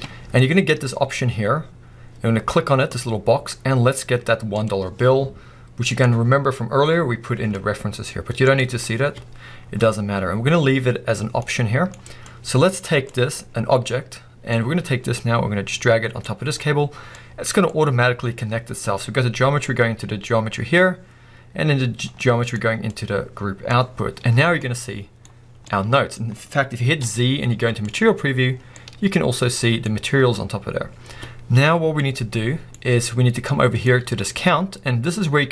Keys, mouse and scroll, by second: 5.1 click, 15.0-17.5 drag, 24.4 scroll down 2, 24.6-25.3 middle drag, 25.3 scroll up 2, 25.5 scroll down 2, 25.7-26.2 middle drag, 26.2 scroll up 2, 28.1 z, 28.5 scroll down 1, 28.8-29.9 middle drag, 29.9-30.7 scroll up 2.